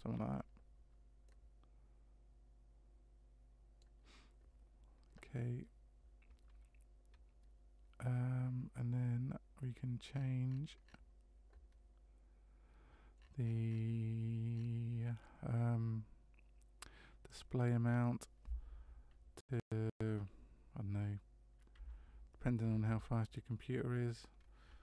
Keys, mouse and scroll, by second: 1.2 middle click, 10.1-13.1 scroll up 6, 13.1-14.5 scroll up 8, 14.5-17.2 scroll up 5, 17.2 click, 17.2-17.5 scroll up 2, 22.8 KP_0.